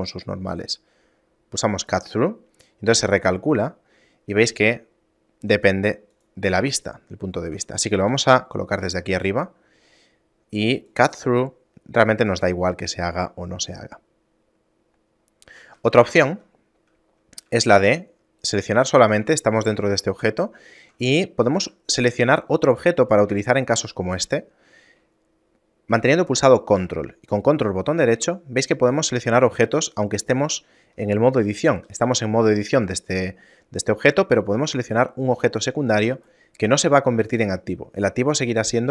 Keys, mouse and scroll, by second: 2.0 click, 3.7 shift+middle click, 6.3 click, 6.9 shift+middle click, 8.3 KP_7, 9.1-9.5 scroll down 1, 9.5 middle click, 10.0 scroll up 2, 11.1 click, 11.1-11.5 scroll up 2, 13.2 middle click, 14.0 shift+middle click, 16.1 ctrl+z, 17.6 Tab, 18.6 right click, 19.3 Tab, 20.3 shift+middle click, 22.1 middle click, 22.5 shift+middle click, 28.2 ctrl+right click, 29.2 middle click, 29.5 scroll down 1, 30.1 ctrl+right click, 31.8 a, 32.2 a, 35.0 ctrl+right click, 37.2 shift+middle click.